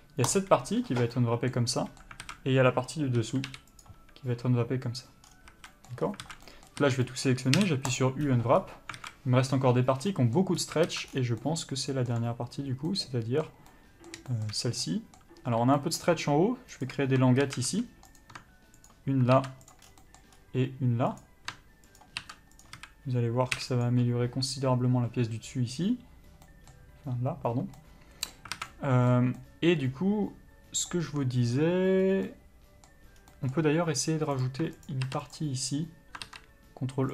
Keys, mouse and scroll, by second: 0.6 u, 2.0 middle click, 2.5 alt+a, 3.4 l, 4.1 u, 5.5 scroll down 1, 5.7 a, 5.9 middle click, 6.3 scroll up 1, 6.5 alt+a, 6.7 middle click, 7.1 a, 7.3 middle click, 8.3 u, 9.2 alt+a, 10.4 middle click, 10.9 scroll up 1, 11.1 alt+a, 11.4 scroll down 1, 11.7 middle click, 14.6 shift+middle click, 15.1 middle click, 16.4-17.0 scroll up 1, 17.0 click, 17.7 a, 18.0 2, 18.4 click, 19.2 ctrl+click, 20.0 ctrl+e, 20.1 scroll down 1, 20.3 middle click, 20.6-21.4 scroll up 1, 21.4 click, 22.3 ctrl+click, 22.9 ctrl+e, 23.1 a, 24.2 u, 28.0 middle click, 28.8 alt+a, 28.9 middle click, 32.3 scroll up 1, 32.5 middle click, 33.5 scroll down 1, 33.6 middle click, 34.0 scroll up 1, 34.6 click, 35.2 ctrl+click.